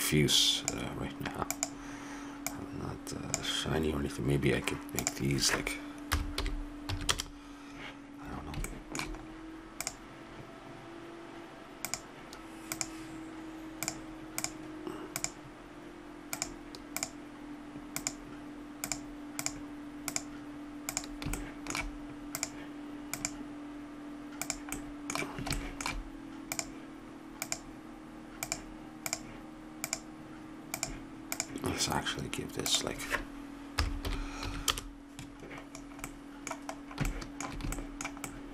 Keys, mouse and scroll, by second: 5.0-6.8 drag, 8.7 middle click, 9.8-11.7 drag, 11.9-18.9 drag, 19.4-21.0 drag, 21.4 click, 22.3-24.9 drag, 26.5-34.5 drag, 26.5-28.5 right drag, 36.1-38.5 middle drag.